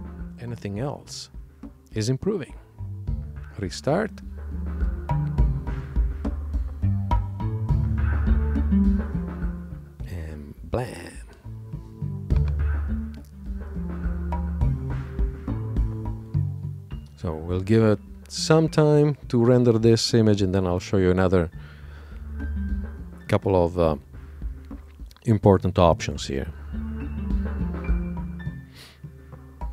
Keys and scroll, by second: 0.2 shift+super+l.